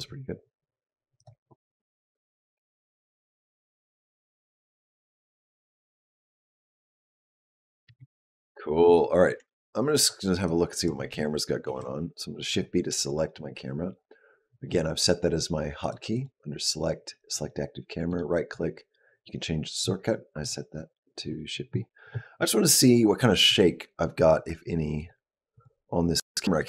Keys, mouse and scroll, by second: 1.2 click, 5.0 click, 7.8 space, 9.2 Tab, 10.4 click, 11.5 shift+b, 13.2-14.5 scroll up 3, 14.5-15.7 scroll up 1, 15.7 click, 16.0 click, 20.2 click, 22.7 click, 23.3 click, 24.0 click, 24.8 click, 25.4 click, 26.4 click.